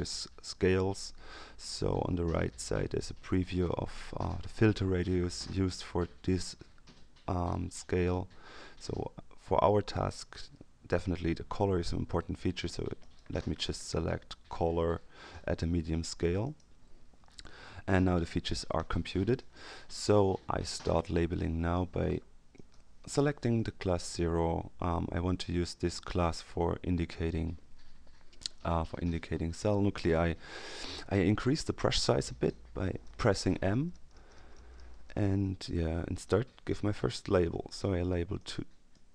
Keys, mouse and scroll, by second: 3.0 click, 5.6 click, 13.0 click, 16.4 click, 22.5 click, 28.8 middle click, 33.5 m, 36.2-37.4 drag, 38.3-39.1 drag.